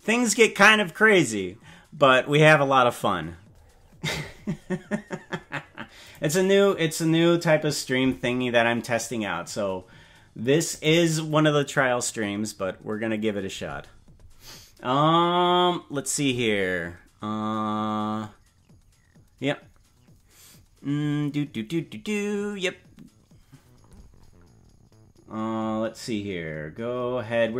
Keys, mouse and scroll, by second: 6.1 click, 10.7 click.